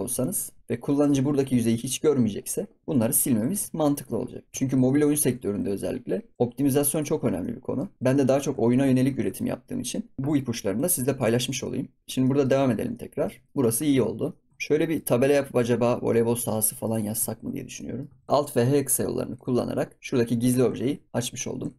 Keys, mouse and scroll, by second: 0.2 ctrl+s, 0.8-1.2 middle drag, 1.2 scroll up 2, 2.9-3.5 middle drag, 3.5 ctrl+s, 3.7-4.1 scroll down 1, 4.1-4.4 scroll up 2, 4.4 scroll down 2, 4.5 ctrl+s, 4.8 shift+middle click, 5.1 ctrl+s, 6.6 ctrl+s, 6.8 click, 7.1 scroll down 4, 7.4-7.9 middle drag, 7.9-8.4 scroll up 4, 8.0 middle drag, 8.5 ctrl+s, 8.7 scroll down 2, 9.2 ctrl+s, 10.8 middle click, 11.3 ctrl+s, 11.6 middle click, 12.0 scroll down 3, 12.2-12.6 middle drag, 12.6 ctrl+s, 12.8 scroll up 2, 12.9-13.2 middle drag, 13.2 ctrl+s, 13.4-14.0 scroll up 3, 13.5 middle drag, 14.0 scroll down 2, 14.2 middle drag, 14.5 scroll up 2, 14.7-16.4 shift+middle drag, 16.4 ctrl+s, 16.5-16.9 scroll down 1, 16.9 click, 17.2 ctrl+s, 17.5 scroll down 1, 17.7-18.1 middle drag, 18.1 ctrl+s, 18.3-19.3 scroll down 3, 19.3 alt+h, 19.9 scroll up 4, 20.7 ctrl+s, 21.1 click, 21.4 scroll down 4, 21.6 ctrl+s.